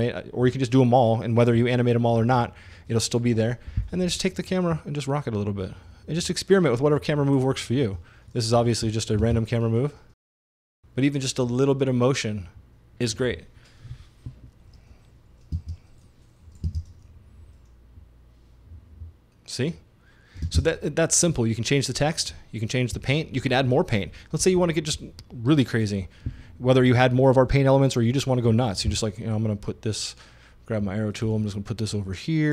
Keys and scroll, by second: 9.2 space, 15.6 space, 16.7 space, 20.5 space, 28.9 super+d.